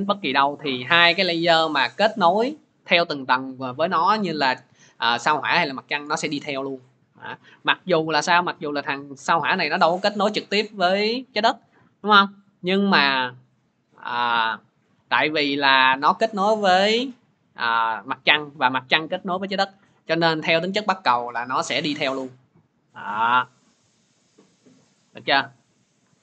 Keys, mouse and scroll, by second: 3.0-6.0 drag, 7.8-14.3 drag, 17.9-20.1 drag.